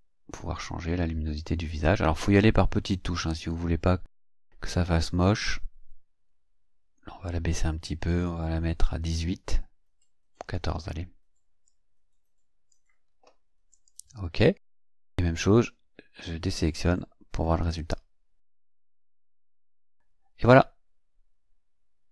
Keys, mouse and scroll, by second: 11.7 click, 13.7 click, 16.5 click, 18.0-18.3 ctrl+scroll down 2, 18.6 ctrl+scroll down 2, 19.3 scroll up 2.